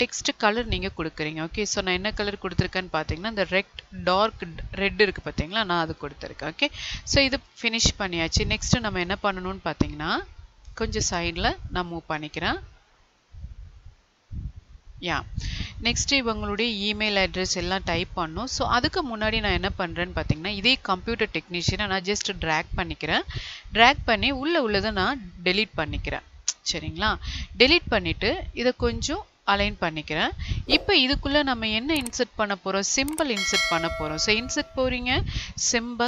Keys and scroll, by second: 26.3 Delete.